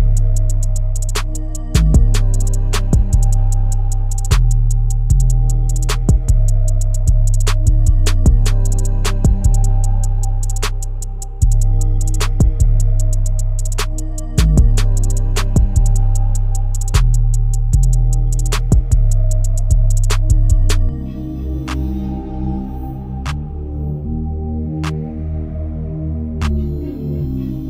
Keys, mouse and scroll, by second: 0.7 scroll up 3, 1.1-1.6 shift+middle drag, 1.6-2.3 scroll up 7, 2.3-3.2 shift+middle drag, 3.2-3.5 scroll up 4, 4.2-4.8 shift+middle drag, 4.8 scroll down 4, 5.3-6.5 shift+middle drag, 6.7-7.1 middle drag, 7.1-8.1 scroll down 6, 8.1-8.8 shift+middle drag, 8.8 scroll down 2, 9.2-9.6 scroll up 5, 10.1-10.4 scroll down 4, 10.7-13.8 shift+middle drag, 13.8 click, 15.7 click.